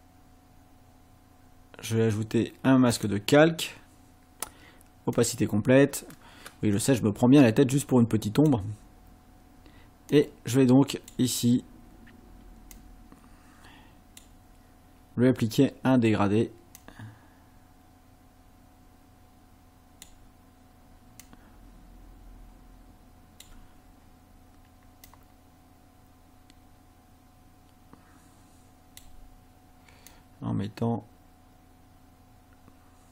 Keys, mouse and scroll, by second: 2.9 click, 5.2 click, 8.4 click, 10.1-11.3 drag, 12.7-14.3 drag, 16.8-20.3 drag, 21.2-23.6 drag, 25.1-29.2 drag, 30.1-33.1 drag.